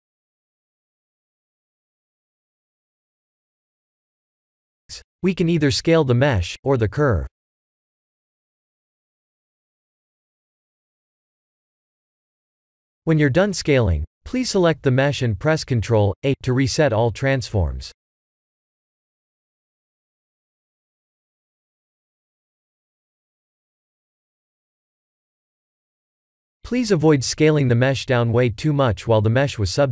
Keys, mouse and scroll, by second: 0.7-2.0 drag, 2.8-3.4 middle drag, 3.6-4.2 scroll down 3, 4.2 s, 6.9 click, 7.4 scroll up 3, 7.9-9.2 middle drag, 10.0 click, 10.4-12.1 scroll down 6, 12.1 scroll up 3, 13.2 ctrl+a, 15.6 click, 16.4 click, 17.0 ctrl+a, 18.5-19.9 middle drag, 20.9 ctrl+3, 21.6-22.7 middle drag, 24.2 click, 27.3 click.